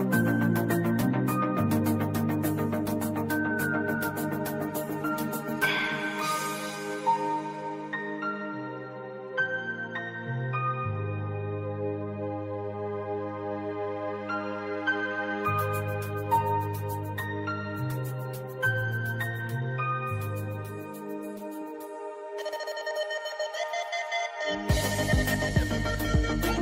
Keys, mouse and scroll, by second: 2.0 click, 5.3-8.1 drag, 8.3-9.2 click, 13.5 click, 15.0 v, 15.4-16.5 drag, 17.2 ctrl+2, 17.6 click, 18.9 right click, 19.6-23.4 drag, 25.9 click.